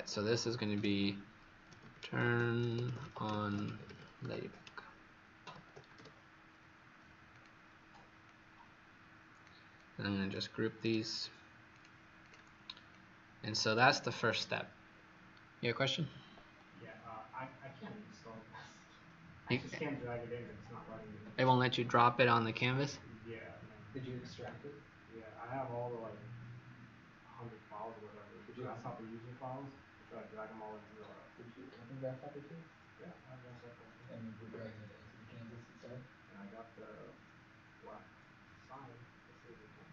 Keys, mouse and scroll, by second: 0.7-6.4 typing, 7.2 click, 10.7 right click, 12.2 click, 12.9 click, 14.2 click.